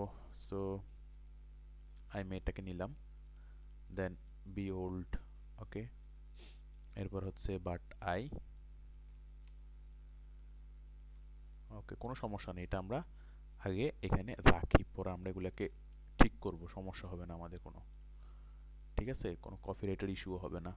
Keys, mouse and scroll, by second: 0.9 alt+shift+click, 2.4 ctrl+click, 4.3 alt+shift+click, 8.6 alt+shift+click, 10.0-13.7 alt+shift+drag, 16.6-17.7 drag, 19.1 alt+shift+click.